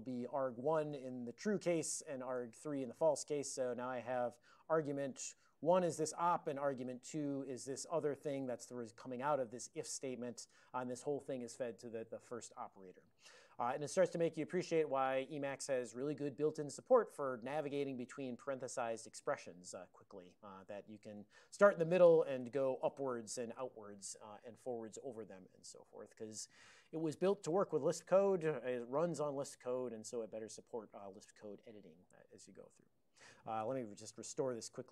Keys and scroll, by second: 0.0-0.1 typing, 0.3 alt+f, 1.1 alt+b, 1.4 ctrl+d, 1.7 alt+f, 1.9 alt+f, 2.0-2.7 typing, 3.8-4.5 typing, 5.4 ctrl+alt+b, 6.2 ctrl+alt+f, 6.9 ctrl+alt+f, 8.9 alt+b, 9.1 alt+b, 9.2 alt+b, 10.6 ctrl+e, 17.9 ctrl+b, 18.4 ctrl+alt+b, 20.9 ctrl+f, 21.1 ctrl+f, 21.3 ctrl+f, 22.5 ctrl+alt+u, 22.9 ctrl+alt+u.